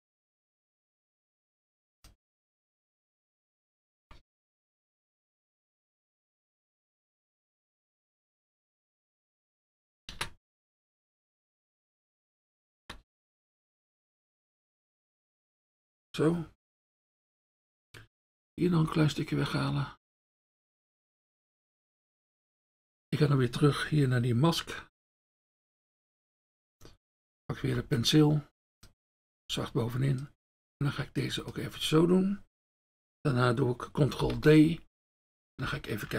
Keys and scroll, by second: 25.5 F1, 29.1 F1, 34.2 ctrl+d.